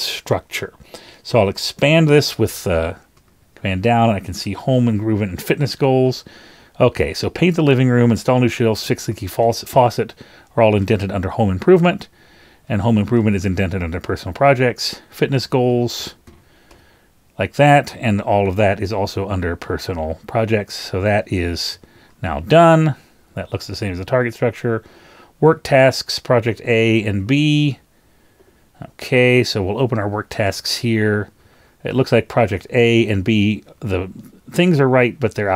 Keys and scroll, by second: 3.2 super+Down, 4.4 super+Page_Down, 4.6 shift+Down, 9.1 shift+Down, 9.4 shift+Down, 15.7 shift+Down, 15.9 shift+Down, 20.1 super+Up, 21.2 super+Up, 21.8 super+Up, 30.4 super+Down, 32.4 shift+Down, 32.6 shift+Down, 34.7 shift+Up.